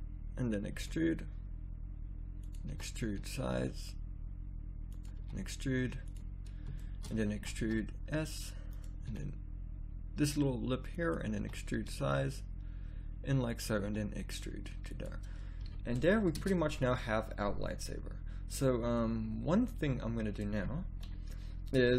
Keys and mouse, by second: 0.8 e, 2.7 e, 5.2 e, 7.3 e, 9.0 e, 11.4 e, 13.8 e, 15.6 z, 16.3 Tab, 21.0 KP_1.